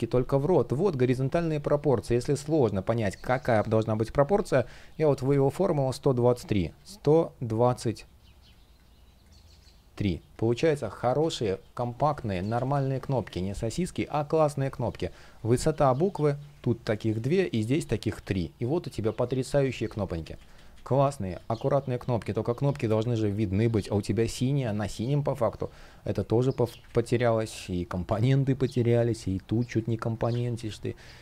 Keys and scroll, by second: 1.2 shift+p, 10.7 super+z, 19.4 super+z, 21.1 space, 23.4 space, 25.5 shift+p, 26.6 super+z, 28.6 space, 30.1 super+z, 30.4 space.